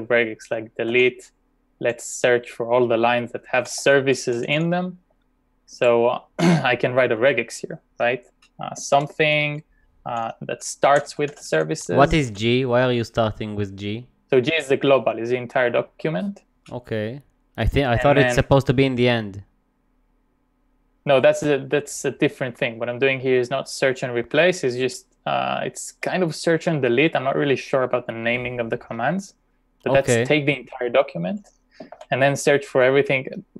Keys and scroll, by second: 1.0 g, 1.8 /, 3.3-5.1 typing, 6.2 BackSpace, 6.4 BackSpace, 9.9-12.8 typing, 31.3 ., 32.0 shift+8.